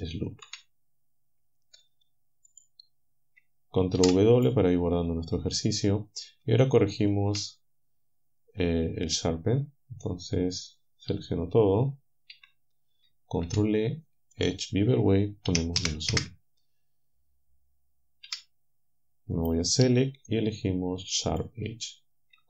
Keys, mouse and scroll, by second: 0.5 a, 2.5 click, 4.0 ctrl+w, 6.6-11.1 shift+right drag, 12.3 a, 13.5 ctrl+e, 15.5 -, 16.1 Return, 18.3 a, 19.4 click, 21.3 click.